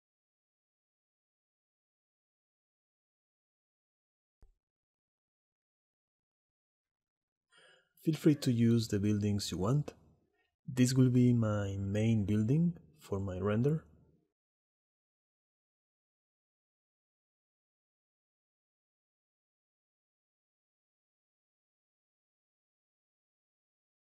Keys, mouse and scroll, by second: 1.2-3.6 middle drag, 3.6 click, 4.1 shift+middle click, 5.0 click, 6.2 g, 6.9 click, 7.5 shift+middle drag, 7.8 middle click, 8.2 click, 8.8 middle click, 9.3-9.7 middle drag, 10.3 click, 10.7 middle click, 12.9 middle click, 14.4-17.7 typing, 14.8 click, 15.2 shift+click, 15.8 click, 16.4 click, 17.4 click, 17.8 click, 18.2 click, 18.8 click, 19.3 click, 19.8-23.1 typing, 20.3 click, 20.7 click, 21.3 click, 21.9 click, 22.6 click, 23.3-24.0 drag.